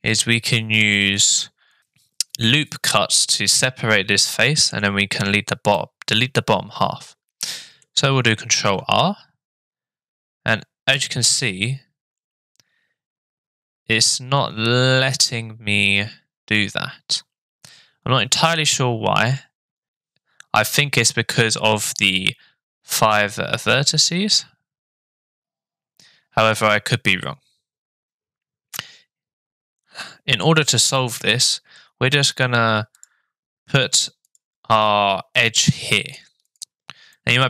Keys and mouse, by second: 4.3 middle click, 5.8-7.8 middle drag, 8.5 ctrl+r, 35.4 middle click, 36.5 click, 37.2 middle click.